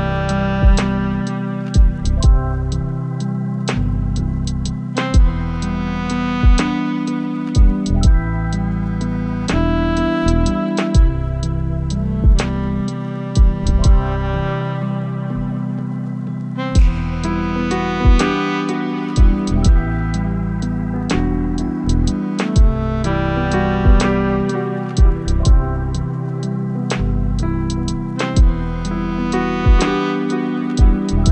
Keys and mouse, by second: 0.9 click, 2.2 click, 8.2-10.0 drag, 11.6 t, 16.2 click, 22.6 click, 24.0 click, 25.4 ctrl+z, 27.9 click, 30.7-31.3 drag.